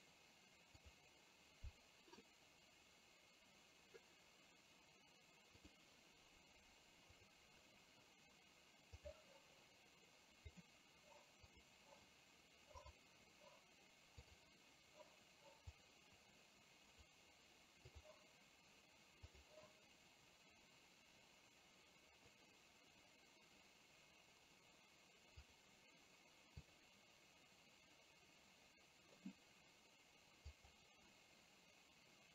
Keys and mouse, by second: 12.8 click, 14.2-16.0 drag.